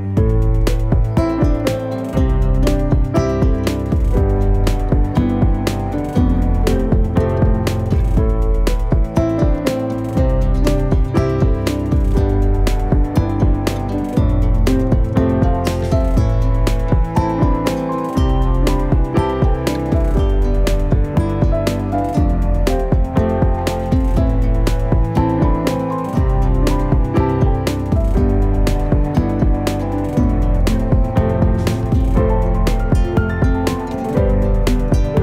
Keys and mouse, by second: 0.5 z, 2.2 g, 3.1 r, 4.0 middle click, 4.6 middle click, 4.9 g, 5.7 r, 6.6-7.1 middle drag, 7.2-7.6 middle drag, 7.9 middle click, 8.4 g, 9.0 r, 10.7-11.1 middle drag, 11.2 z, 12.0 shift+a, 13.5 shift+c, 14.6 shift+middle click, 14.9 shift+a, 17.2 s, 18.6 s, 20.2 Tab, 24.1 shift+right click, 25.1 shift+right click, 25.5 middle click, 26.1 middle click, 26.6 e, 29.6 click, 30.3 ctrl+z, 34.3 a, 34.8 middle click.